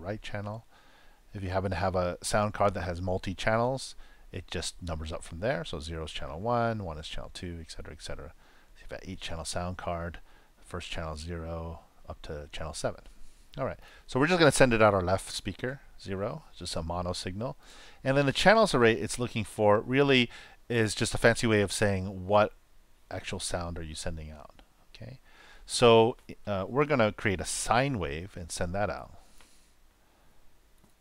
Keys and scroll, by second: 28.9 shift+s, 29.1 shift+i, 30.5-31.0 typing.